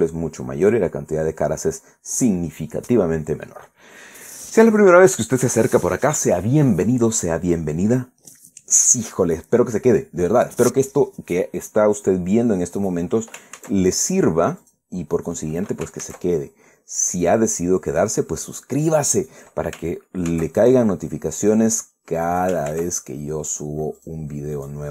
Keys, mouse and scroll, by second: 0.9 scroll down 1, 1.0 scroll up 3, 13.5 right click, 14.3 ctrl+a, 15.3 click, 15.8 right click, 16.7 ctrl+a, 17.9 click, 19.9 right click, 21.0 ctrl+a, 22.1 click, 23.0 ctrl+right click, 23.4 ctrl+a, 24.7 click.